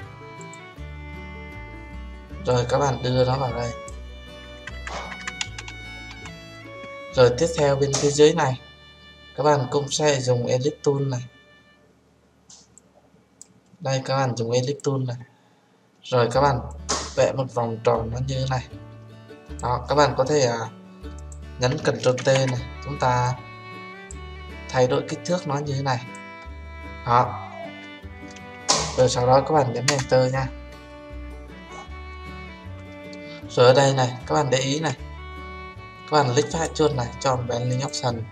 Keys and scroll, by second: 22.1 ctrl+t, 29.8 Return.